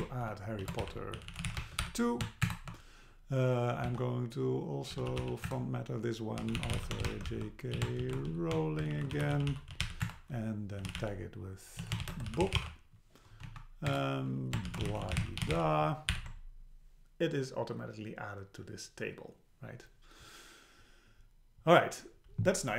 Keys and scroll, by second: 2.5 shift+Return, 5.5 Return, 10.0 Return, 13.5 Down, 13.9 Return, 16.1 alt+h.